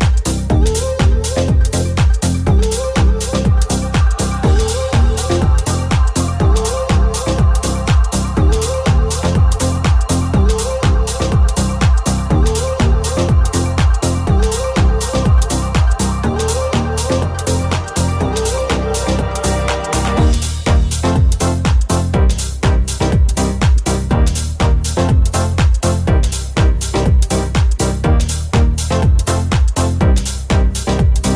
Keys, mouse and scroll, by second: 9.5 e, 12.9 alt+z, 13.3 alt+right click, 13.3-16.1 alt+middle drag, 13.7 alt+z, 13.8 s, 15.8 g, 17.3-18.4 middle drag, 17.6 g, 17.9-23.2 drag, 18.4 alt+z, 19.0 alt+z, 23.2-28.8 middle drag, 23.4-25.8 typing, 28.8 alt+right click, 28.8-31.3 alt+middle drag.